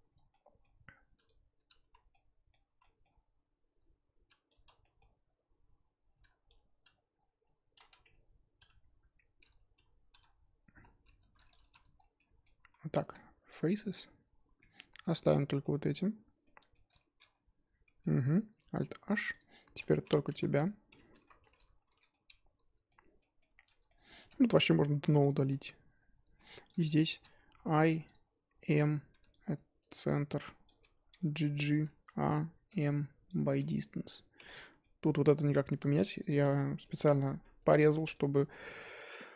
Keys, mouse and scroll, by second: 0.1 click, 0.3 middle click, 0.7-1.2 scroll up 1, 1.8 z, 2.2-2.7 middle drag, 2.7 z, 2.8 middle click, 3.1-4.5 scroll up 2, 4.8 middle click, 5.1-6.5 scroll up 2, 7.1-8.6 scroll down 1, 8.6 ctrl+KP_Add, 9.7 KP_Add, 10.7 KP_Add, 11.6 3, 11.9 scroll down 4, 12.1 middle click, 12.7 z, 13.7-17.2 middle drag, 17.2 Tab, 17.8 Tab, 18.0 middle click, 18.9 alt+h, 19.3 click, 21.2 l, 21.8 shift+h, 22.1-23.5 middle drag, 23.5-23.8 scroll up 1, 23.8-24.2 middle drag, 24.2 3, 24.6 click, 25.2 x, 25.5-26.7 middle drag, 26.7 click, 27.0-27.8 shift+middle drag, 27.8 i, 29.8 m, 30.1 scroll up 2, 30.3 1, 30.7 click, 31.1 g, 31.9 a, 33.4 m, 33.6 Tab, 34.4 Tab, 34.5-35.8 middle drag, 35.8 Tab, 36.5 click, 36.6 scroll down 3, 36.8-38.2 middle drag, 38.2 click, 38.9 middle drag, 39.2 scroll up 1.